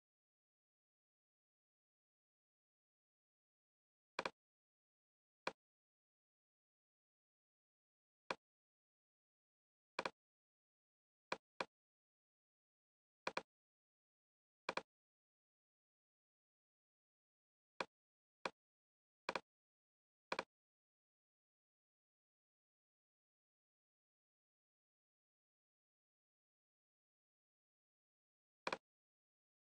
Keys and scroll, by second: 21.4-27.4 typing.